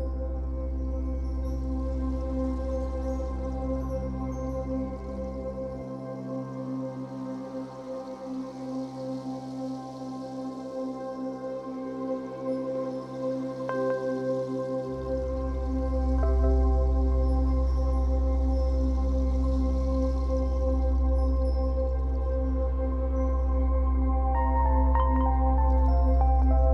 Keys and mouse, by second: 0.7 click, 1.2 click, 2.0 click, 2.5 click, 3.7 click, 4.4 click, 5.5 click, 6.3-6.6 ctrl+alt+drag, 6.8 alt+click, 8.5-9.5 drag, 9.5 g, 9.7 y, 11.0-13.2 drag, 13.3 alt+shift+click, 13.9 click, 15.1 click, 15.5-16.0 drag, 16.3-16.6 drag, 18.4 click, 19.0 click, 20.2 click, 20.9 alt+click.